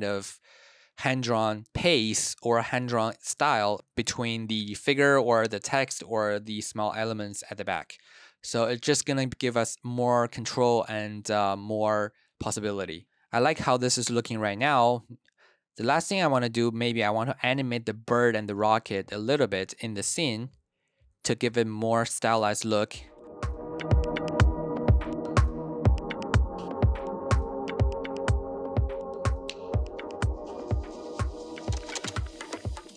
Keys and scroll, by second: 14.5 space, 15.8 space, 22.1 super+s, 23.6 p, 24.6-27.5 typing, 28.5 p, 30.0 space, 30.3 space, 31.3 BackSpace, 32.1 BackSpace, 32.3 space.